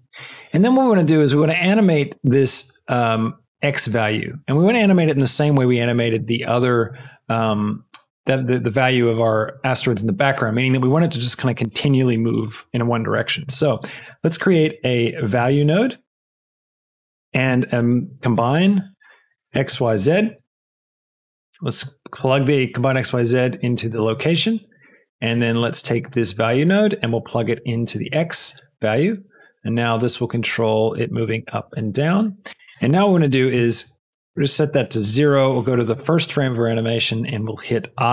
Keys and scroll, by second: 14.6 shift+a, 15.4 a, 17.0 shift+a, 18.3 c, 18.5 m, 18.7 b, 19.2 Down, 19.6 Return, 34.1 KP_0, 34.3 Return.